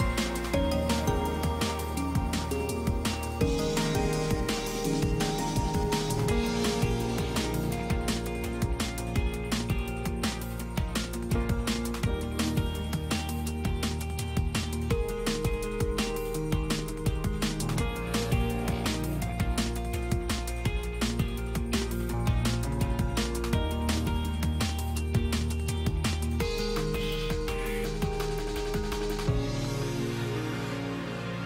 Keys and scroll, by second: 1.5 ctrl+space, 3.8 space, 22.3 space, 24.9 space.